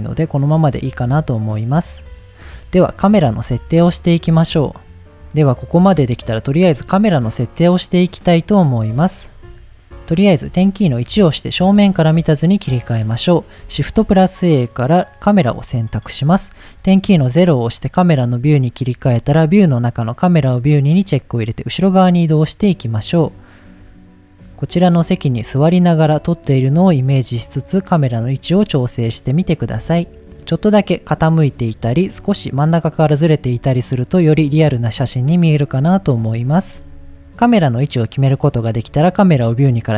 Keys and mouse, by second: 0.0-0.4 middle drag, 0.6 middle click, 1.1-1.5 middle drag, 3.7-4.1 shift+middle drag, 5.0 ctrl+s, 10.1 middle drag, 11.1 KP_1, 12.8 click, 13.7 shift+a, 17.0 KP_0, 18.8 click, 19.7 click, 23.0-26.7 middle drag, 28.8 ctrl+middle click, 30.1 shift+middle click, 30.4-31.6 middle drag, 31.9-33.5 shift+middle drag, 33.9-35.5 middle drag, 37.2 click, 39.6 click.